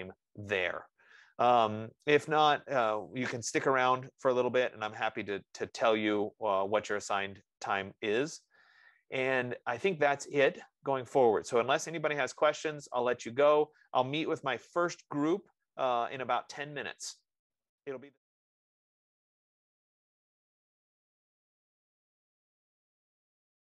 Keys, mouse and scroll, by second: 3.7 F15.